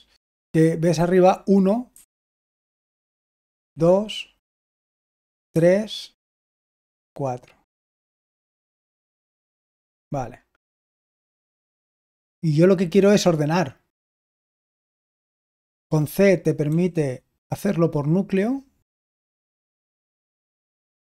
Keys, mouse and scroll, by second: 2.8-6.9 typing, 8.6-9.1 typing.